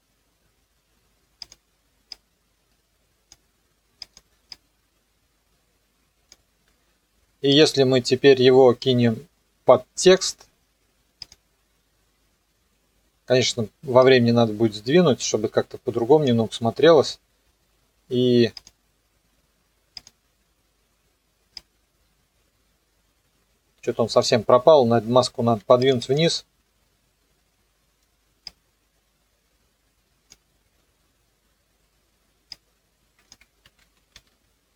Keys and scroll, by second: 33.7 ctrl+z, 34.1 s.